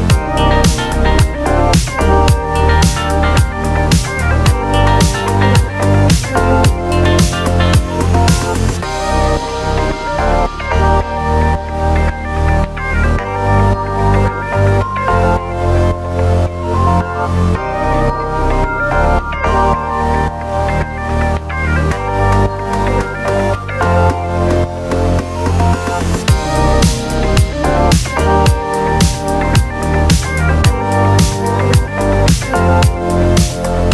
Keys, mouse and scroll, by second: 2.3-3.2 typing, 4.1 click.